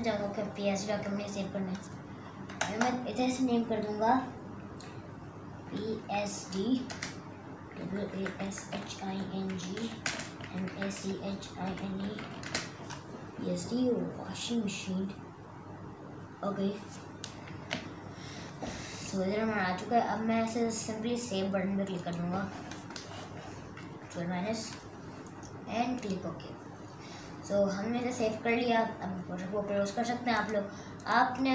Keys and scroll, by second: 2.7 BackSpace, 5.5-12.7 typing, 17.6 super+KP_Add, 19.2 super+KP_Add, 24.0 super+KP_Subtract.